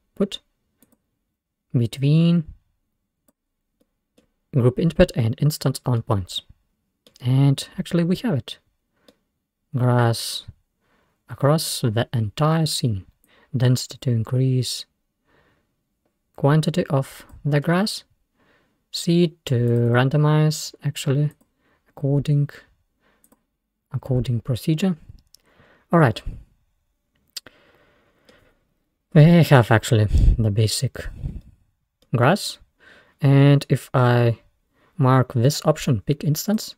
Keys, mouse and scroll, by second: 1.9-3.7 drag, 3.7 scroll down 2, 3.9-7.9 middle drag, 7.9-8.7 scroll up 3, 8.7-9.1 scroll down 1, 9.1-13.0 middle drag, 13.3-16.0 drag, 17.9-18.4 scroll down 2, 19.7-25.6 drag, 25.6-26.2 scroll up 1, 26.2-28.8 middle drag, 28.8-29.1 scroll up 2, 29.7 scroll down 1, 30.4-31.0 scroll up 1, 31.0-31.5 scroll down 1, 31.5-34.4 middle drag, 36.6 click.